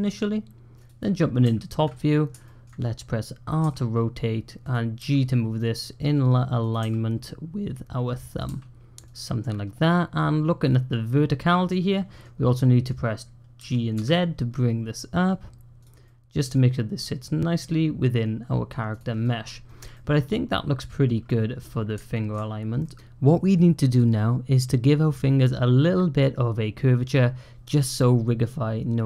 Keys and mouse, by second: 2.3 shift+middle click, 3.5 r, 4.8 g, 6.7 r, 8.3 g, 9.6-12.1 drag, 12.4 middle click, 13.4 g, 15.9 middle click, 16.8 click, 17.4-18.6 middle drag, 19.1 click, 19.8-20.9 drag, 22.0 shift+click, 22.7 middle click.